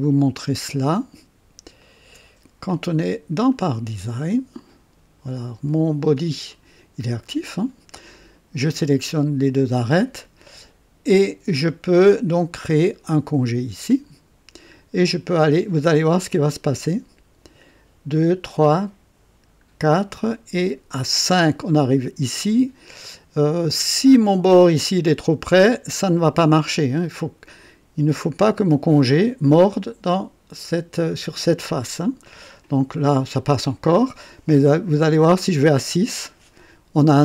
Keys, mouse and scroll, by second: 0.3 click, 1.8 ctrl+click, 3.4 click, 5.2 click, 6.4 click, 13.8 click, 16.9 scroll up 2, 18.2 scroll up 2, 19.7 scroll up 2, 21.1 scroll up 2, 31.0-32.5 drag, 35.8 scroll up 2.